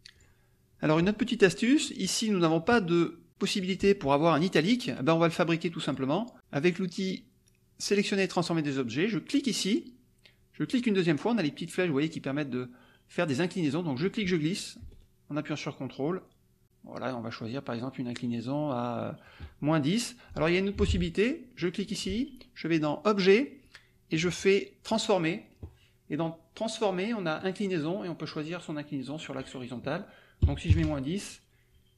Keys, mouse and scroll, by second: 0.1 click, 1.7 click, 3.5 click, 4.3 click, 5.2 click, 5.9 click, 9.4 click, 10.6 click, 14.0-19.4 drag, 20.2 click, 20.8 ctrl+z, 21.6 click, 22.8 click, 25.0 click, 27.4 click, 29.2-30.4 drag, 30.4 KP_Subtract, 30.6 KP_1.